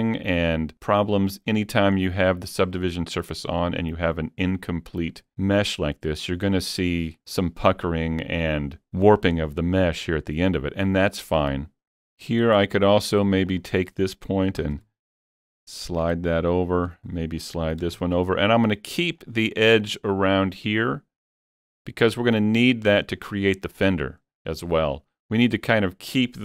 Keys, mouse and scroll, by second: 1.1-2.0 scroll up 3, 2.0-3.8 scroll down 1, 11.2-11.5 scroll down 3, 11.5 middle click, 11.9 middle click, 12.3 scroll, 12.5 scroll up 1, 12.9 click, 13.5 click, 14.6 g, 14.8 g, 16.4 click, 16.9 click, 17.8 g, 18.0 g, 19.2 click.